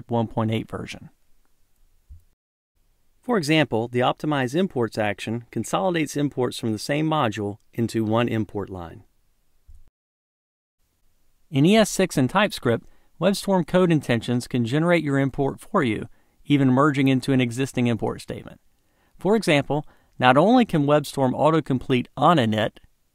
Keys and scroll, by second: 5.8 ctrl+shift+super+a, 20.3 Tab, 20.9 Tab.